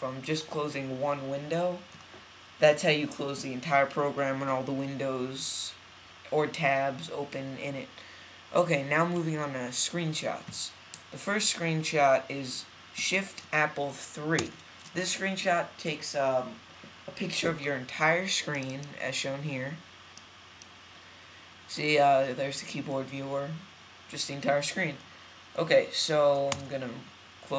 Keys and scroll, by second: 26.4 super+w.